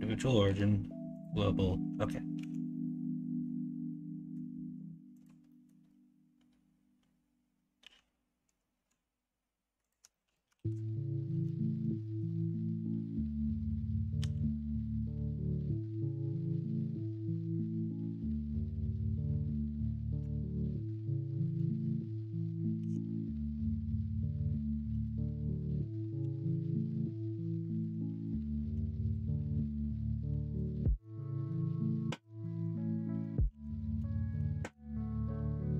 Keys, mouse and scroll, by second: 0.4 ,, 2.3 typing, 4.7 s, 5.5 middle click, 10.2 middle click, 10.5 alt+z, 10.7 middle click, 11.3 alt+z, 11.5 middle click, 12.0 middle click, 14.2 i, 22.7 i, 24.9 i, 28.7 Tab, 29.5-30.3 middle drag, 30.8 middle drag, 31.2 shift+middle drag, 31.7-32.2 middle drag, 32.5 alt+z, 33.0 middle drag, 33.5 alt+z, 33.7 middle drag, 34.1 shift+middle drag, 34.5 middle drag.